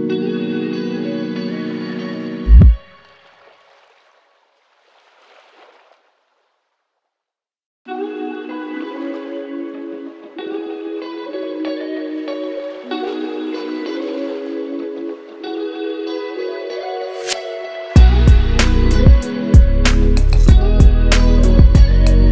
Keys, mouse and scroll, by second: 0.0 Up, 1.6 click, 6.3-6.9 drag, 9.6 Up, 10.2 click, 11.8 click, 12.2 Up, 13.2 Right, 14.5-14.8 click, 15.0 Up, 15.4 Right, 16.6-17.0 drag, 20.2 Down, 20.8 Right, 21.2 click.